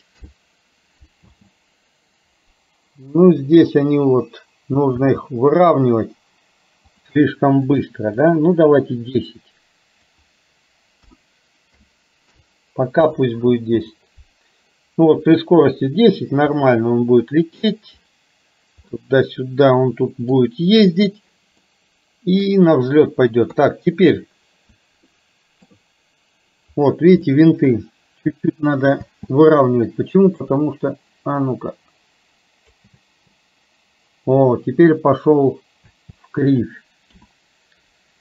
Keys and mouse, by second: 1.3 space, 5.1 space, 7.2-12.4 drag, 13.6 space, 16.7-17.8 middle drag, 18.9-20.4 middle drag, 21.7 middle click, 23.5 KP_3, 25.2 shift+middle click, 27.3 shift+middle click, 29.1 space, 30.6-32.9 drag, 33.1 space, 35.9 space, 37.2 KP_7.